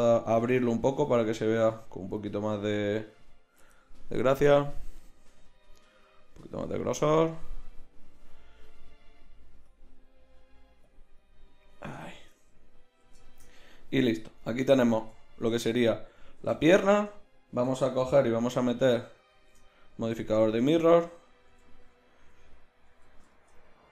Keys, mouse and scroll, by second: 5.3 middle click, 9.0-11.1 drag, 12.8-16.9 middle drag, 16.9 Tab, 18.6 ctrl+shift+w, 19.3 ctrl+shift+q, 21.5 KP_1, 22.9 z.